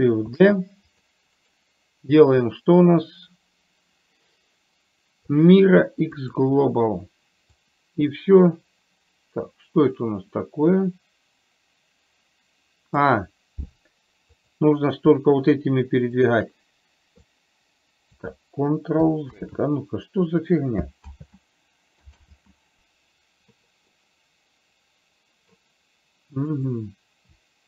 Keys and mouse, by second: 0.6 shift+d, 3.5-7.9 right drag, 7.9-13.4 drag, 14.8 click, 17.8 click, 19.8 ctrl+z, 24.3-25.9 middle drag, 26.9 click.